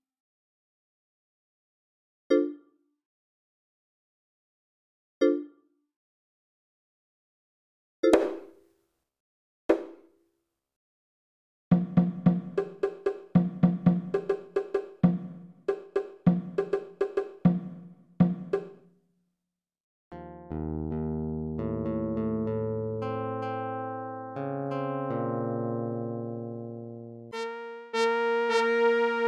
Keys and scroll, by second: 4.4 space, 8.9 space, 10.4 space, 17.7 r.